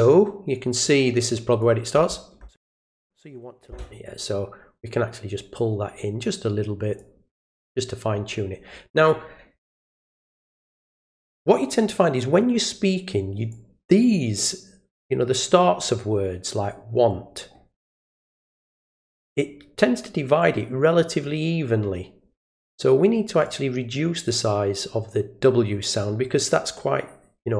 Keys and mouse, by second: 0.8-1.6 drag, 2.8 click, 5.5 click, 7.0 click, 13.5 click, 23.4-26.0 drag.